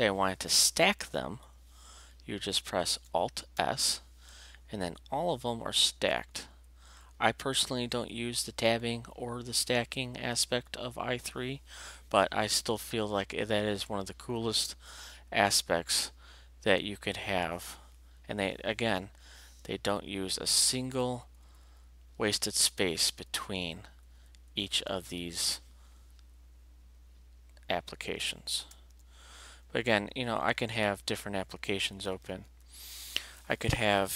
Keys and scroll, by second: 3.6 alt+s, 5.5 alt+Up, 19.6 alt+Up, 22.3 alt+Up, 28.7 alt+e, 31.5 alt+shift+q.